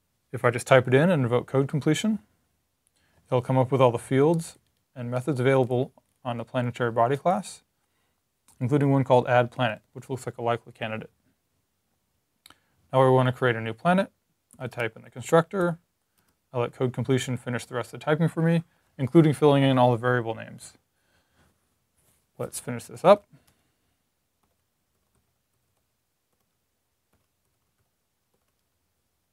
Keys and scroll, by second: 14.2-16.1 typing, 22.7-28.6 typing.